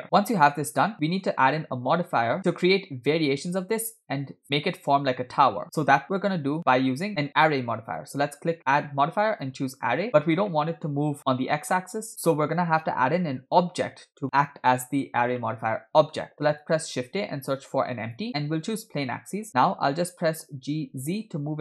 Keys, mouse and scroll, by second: 0.0 right click, 0.0 scroll down 2, 0.2-1.3 middle drag, 1.8 scroll down 1, 2.4 middle click, 5.6 middle click, 7.9-10.0 drag, 10.6-11.1 middle drag, 15.5-16.2 shift+middle drag, 16.7 shift+a, 20.4 g.